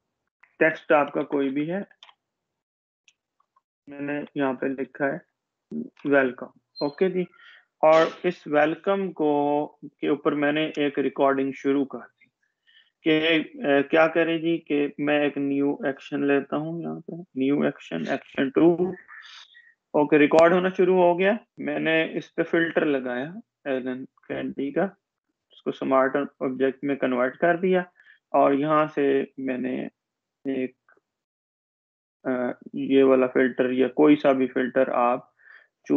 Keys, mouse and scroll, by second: 1.2 shift+click, 4.9 shift+click, 6.1 shift+Caps_Lock, 7.7 shift+w, 8.6 shift+Home, 9.3 Caps_Lock, 9.6-11.1 typing, 13.2-16.4 drag, 20.3-21.8 scroll down 1, 23.9 click, 30.2 click.